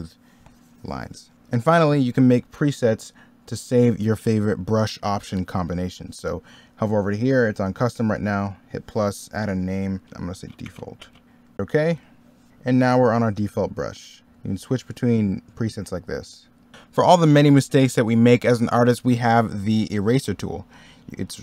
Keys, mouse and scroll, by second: 4.2 middle click, 12.5 middle click.